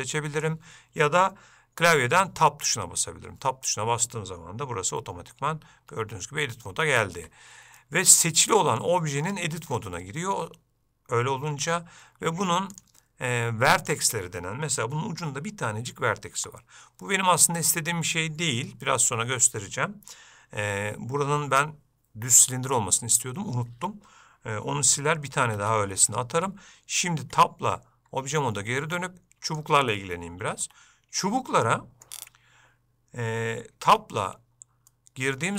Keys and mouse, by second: 0.0 click, 2.4 Tab, 7.9-8.9 middle drag, 25.6 alt+a, 27.4 Tab, 28.7 middle click, 29.6 click, 30.1 shift+middle click, 31.8 middle click, 33.9 Tab, 35.0 middle click.